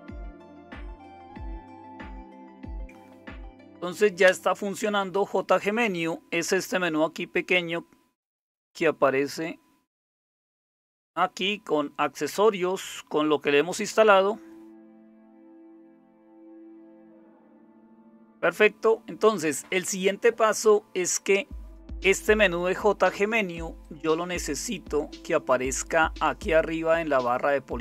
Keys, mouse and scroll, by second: 0.0-27.8 typing, 1.2 ctrl+c, 2.5 Up, 4.2 Return.